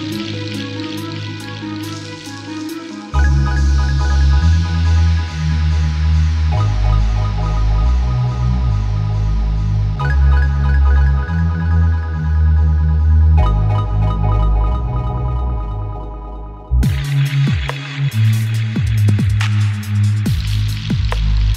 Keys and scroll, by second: 0.0-5.6 typing, 11.5-12.2 typing, 12.9 Return.